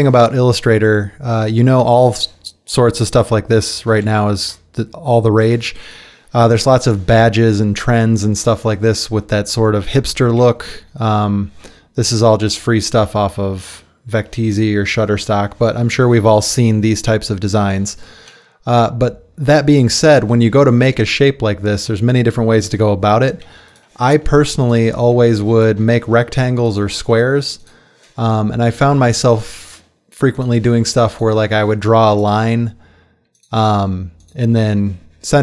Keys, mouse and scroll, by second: 26.9 space, 30.9 space.